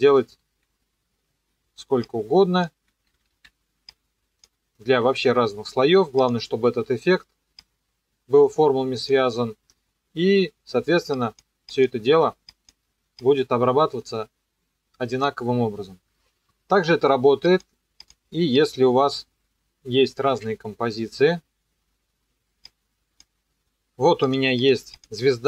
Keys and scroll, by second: 3.3 ctrl+d, 20.3 KP_Enter.